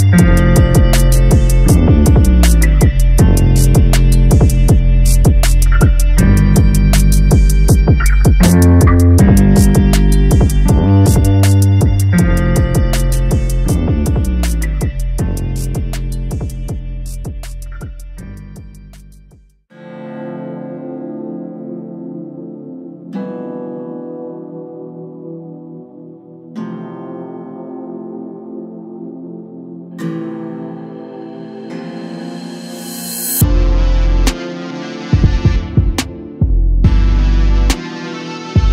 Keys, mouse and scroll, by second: 6.6-9.6 drag, 10.7 click, 11.6 click, 12.2 click, 16.9 click, 17.3-20.0 drag, 20.0 a, 20.2 a, 20.9 click, 22.8 click, 28.6 click, 30.4-31.5 drag, 35.2 a, 35.4 a, 35.6-36.3 scroll down 2, 36.3-37.1 shift+middle drag, 37.1-38.5 scroll up 2, 38.5 click.